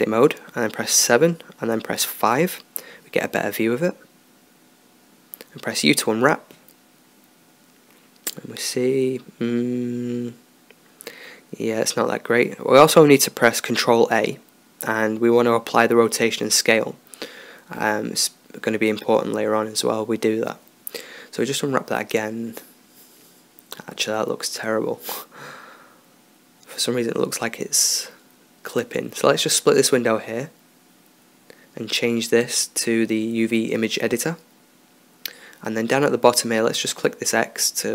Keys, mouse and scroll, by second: 0.6 KP_7, 2.2 KP_5, 5.0 u, 8.0 Tab, 12.0 KP_7, 14.1 ctrl+a, 19.3 Tab, 20.3 u, 21.4 Tab, 29.9-31.8 drag, 32.7-34.6 drag, 36.0-37.3 middle drag, 37.3-37.9 drag.